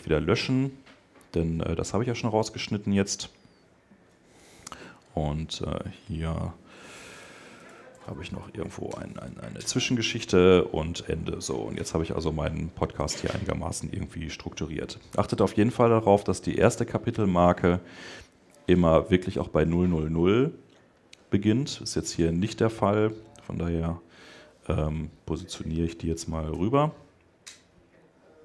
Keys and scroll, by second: 8.7 Return.